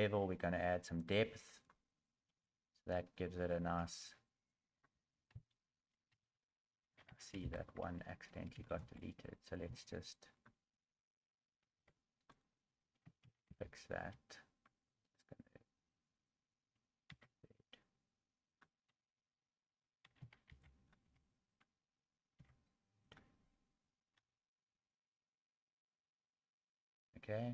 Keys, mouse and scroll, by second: 1.0 click, 1.5 click, 2.8 middle click, 4.0 Tab, 5.3 KP_1.